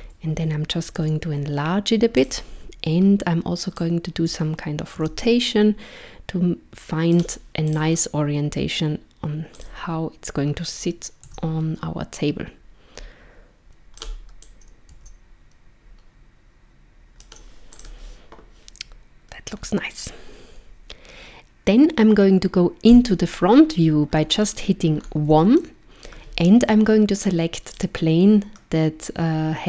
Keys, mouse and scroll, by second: 1.0 s, 3.7 click, 7.7 click, 9.6 click, 10.7 click, 13.6 click, 14.4 click, 17.7 click, 19.5-20.4 scroll up 1, 22.9 KP_1, 24.1-25.0 scroll up 3, 25.0 scroll up 2, 25.6 shift+middle click, 27.7 click.